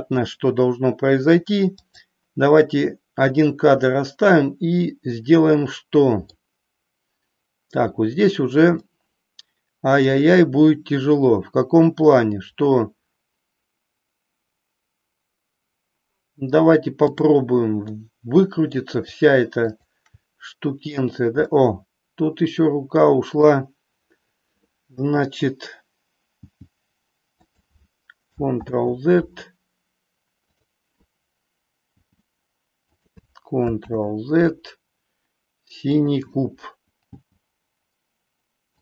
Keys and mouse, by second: 1.9 click, 3.9-6.4 middle drag, 8.9-10.1 middle drag, 17.0 click, 18.0 middle click, 21.4-23.5 middle drag, 26.4 g, 28.6 ctrl+z, 30.5 click, 32.0 g, 33.9 ctrl+z, 36.0 click, 37.2 g.